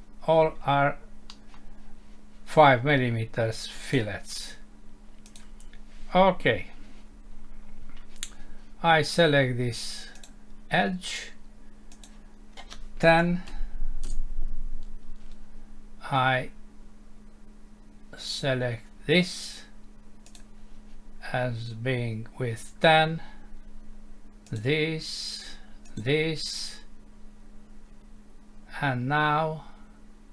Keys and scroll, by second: 1.3 F6.